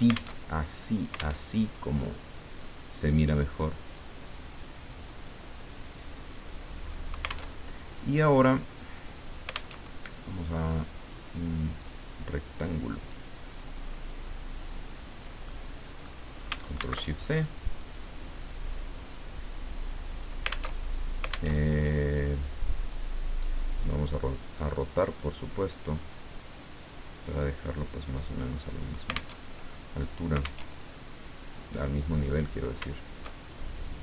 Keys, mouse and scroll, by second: 0.4 alt+Tab, 1.5 alt+Tab, 2.5 click, 3.1-4.9 drag, 5.0-7.3 drag, 7.5 alt+Tab, 9.7 alt+Tab, 11.8 click, 13.1-15.4 drag, 15.4 middle click, 16.8 ctrl+shift+c, 17.8 click, 19.1-20.4 drag, 20.8 alt+Tab, 21.5 alt+Tab, 23.8 click, 25.2-29.1 drag, 29.4 alt+Tab, 30.6 alt+Tab, 32.3 click, 33.4 shift+click.